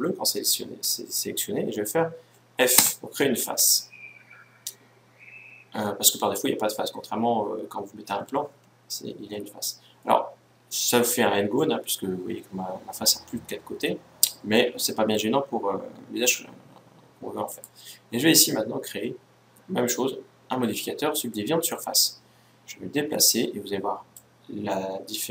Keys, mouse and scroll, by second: 2.5 f, 17.2-19.0 drag, 23.8-25.3 drag.